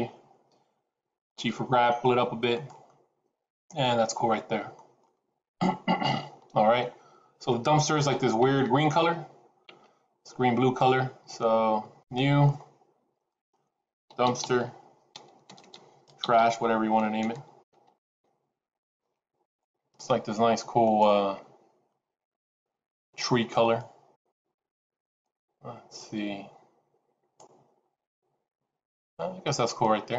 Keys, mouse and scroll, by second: 1.3 g, 2.8 middle click, 4.9 middle click, 11.9 click, 13.2 click, 15.5 BackSpace, 20.8 click.